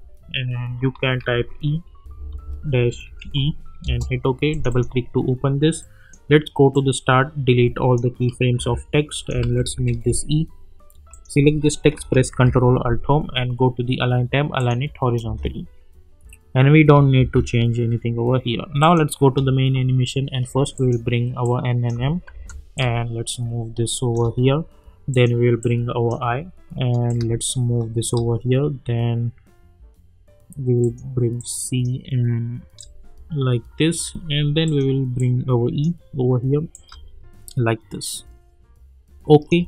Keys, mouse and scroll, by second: 1.1 shift+e, 2.0 space, 2.3 space, 3.2 shift+e, 3.8 Return, 4.5-7.9 drag, 9.4 ctrl+a, 9.8 shift+e, 11.1 click, 12.3 ctrl+alt+Home, 14.5 click, 15.2 space, 17.2 space, 18.8 click, 22.3 v, 22.7-24.3 drag, 30.8-32.0 drag, 36.7-39.6 drag.